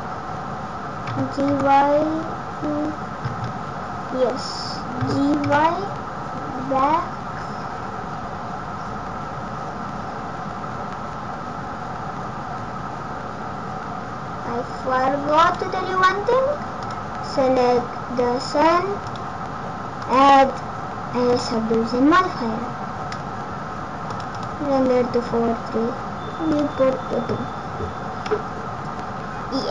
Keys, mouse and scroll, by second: 1.1 g, 16.8 click, 19.0 click, 24.1 click, 26.5 click, 28.3 scroll up 4.